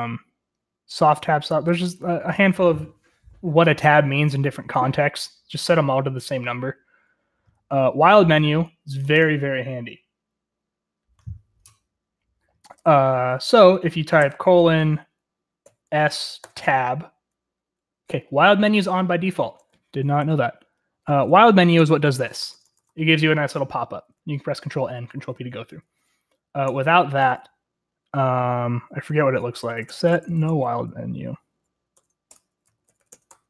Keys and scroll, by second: 15.3-16.0 typing, 16.3 Tab, 20.1 Escape, 21.2-22.0 typing, 22.2-22.6 Tab, 22.8 Tab, 23.0 Tab, 23.7 ctrl+n, 23.9 ctrl+n, 24.3 ctrl+n, 24.5 ctrl+n, 24.6 ctrl+p, 24.8 ctrl+p, 24.9 ctrl+p, 25.4 ctrl+n, 25.4 ctrl+p, 25.7 ctrl+n, 25.8 ctrl+n, 25.9 ctrl+p, 29.0 Escape, 29.2-30.9 typing, 31.9 Tab, 32.2 Return, 32.4-33.4 typing.